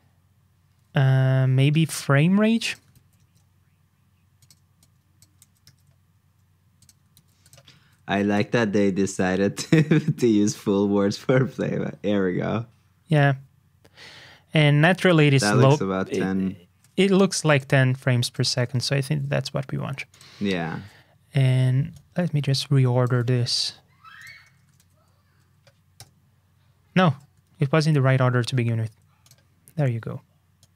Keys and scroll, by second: 2.9 super+c, 3.2 super+Tab, 5.6 super+v, 7.1 super+c, 7.8 super+v, 19.1 super+q, 23.2 super+x, 27.4 super+z.